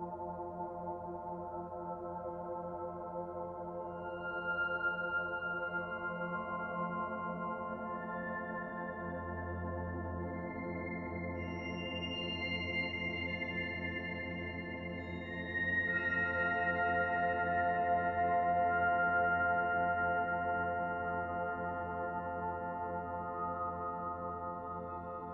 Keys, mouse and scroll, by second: 0.6 click, 2.3 alt+click, 3.6 click, 6.0 alt+shift+click, 6.3 alt+shift+click, 6.6 middle click, 9.2 ctrl+e, 12.2 middle click, 14.4 click, 15.5 click, 16.6 shift+click, 16.8 shift+click, 18.0 Delete, 20.1 click, 20.5 middle click, 22.5 shift+click, 24.9 Delete.